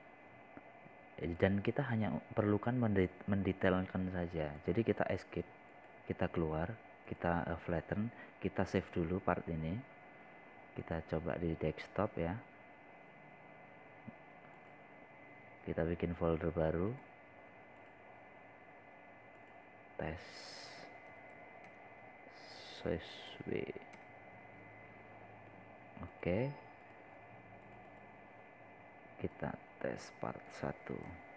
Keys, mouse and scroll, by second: 3.7 scroll up 1, 4.3 click, 5.0 scroll down 1, 7.6 click, 10.5 scroll down 1, 10.9-11.5 scroll up 1, 11.8 click, 19.9 right click, 20.8 click, 23.6-26.3 typing, 27.9 typing, 29.2-31.3 drag.